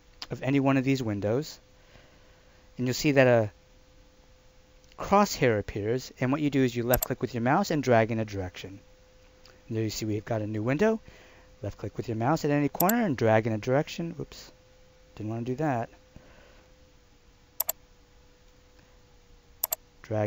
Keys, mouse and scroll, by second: 6.9 click, 12.8 click.